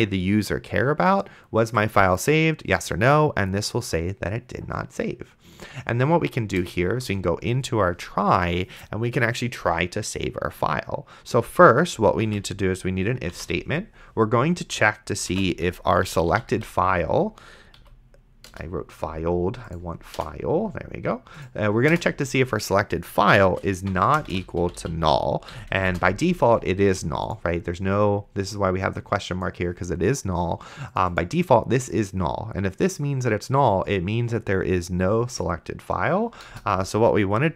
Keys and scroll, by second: 7.3 Return, 12.3 f, 13.6 shift+9, 15.3-17.0 typing, 17.8 Down, 18.5 Return, 20.2 BackSpace, 23.5-26.2 typing, 25.5 End, 36.8 Return.